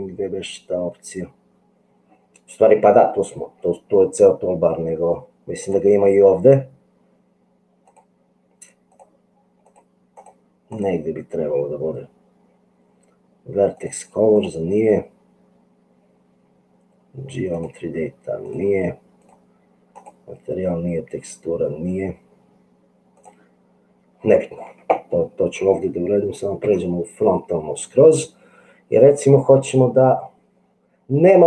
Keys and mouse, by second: 5.7 click, 8.0 click, 13.8 click, 14.3 click, 17.5 click, 19.4 click, 19.9 click, 26.7 KP_1.